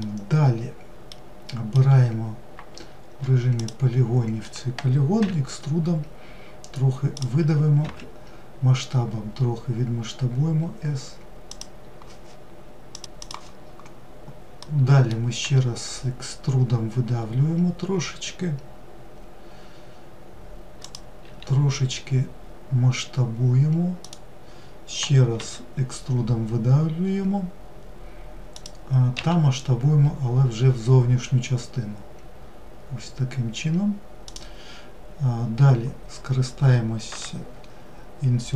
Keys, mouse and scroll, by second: 2.0 3, 2.4 click, 13.1 middle click, 14.0 e.